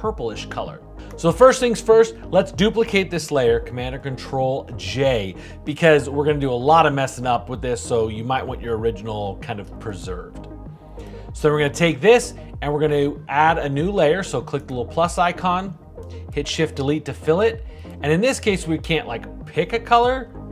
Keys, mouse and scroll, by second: 3.5 super+j, 16.7 shift+Delete.